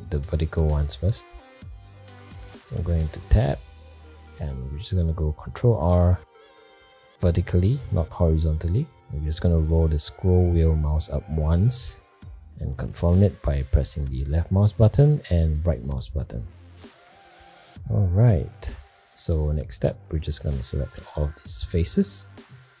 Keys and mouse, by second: 2.3 middle click, 2.8 Tab, 3.4 middle click, 5.8 ctrl+r, 16.9 middle click, 17.6 shift+middle click, 18.6 middle click, 19.5 shift+middle click, 20.9 a.